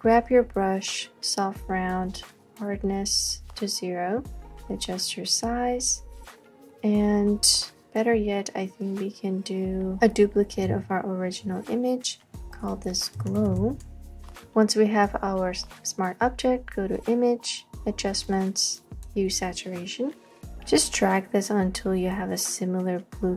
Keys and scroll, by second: 7.9 BackSpace, 10.0 BackSpace, 10.7 super+j, 13.0-14.9 typing.